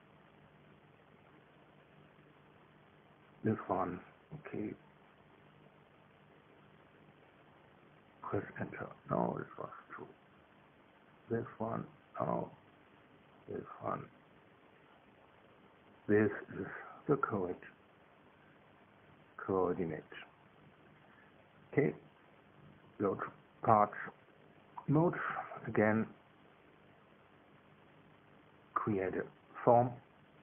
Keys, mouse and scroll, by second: 1.3 click, 3.7 click, 5.0 middle click, 5.8-8.5 drag, 8.5 Return, 10.2 middle click, 11.3 middle click, 11.8 Return, 13.8 Return, 15.2 Return, 21.0 click, 23.0 click, 25.6 click, 26.4 click, 27.6 click, 28.6 click, 29.8 click.